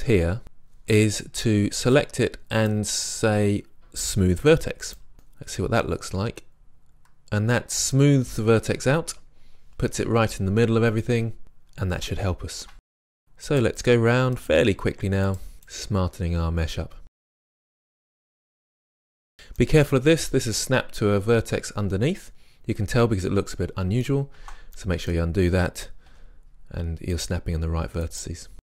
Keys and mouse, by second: 2.0-5.2 drag, 5.1 Tab, 5.2 middle drag, 8.6 Tab, 12.2 middle click, 12.9 right click, 13.2-18.2 typing, 14.3 click, 14.6 click, 15.4 click, 16.3 middle click, 16.4 click, 16.6 middle click, 16.9 click, 17.0 right click, 17.2 click, 17.6 click, 18.4 right click, 18.7 right click, 18.8 click, 21.4-24.4 middle drag, 24.4 ctrl+z, 26.1 g, 27.3 click, 28.6 g.